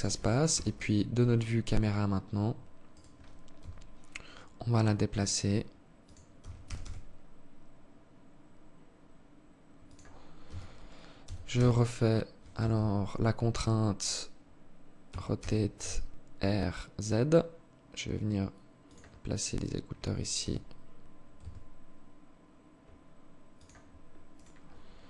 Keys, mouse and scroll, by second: 2.2 right click, 2.9 g, 5.7 g, 9.8 r, 14.4 r, 18.8 right click, 19.7 g, 23.6 right click, 24.6 r.